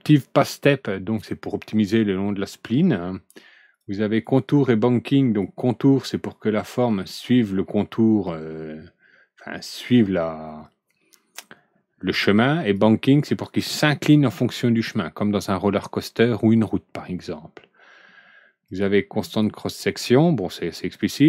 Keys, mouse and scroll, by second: 12.5 click, 18.6 click, 19.2 click, 20.9 click.